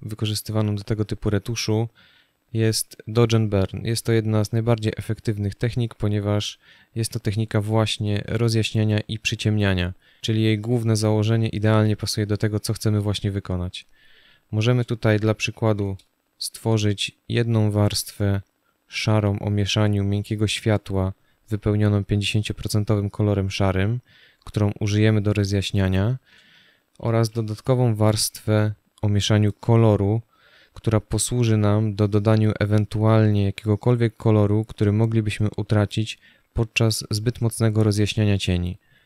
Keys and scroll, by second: 2.2 space, 5.6 space, 15.3 ctrl+shift+n, 26.7 ctrl+shift+n.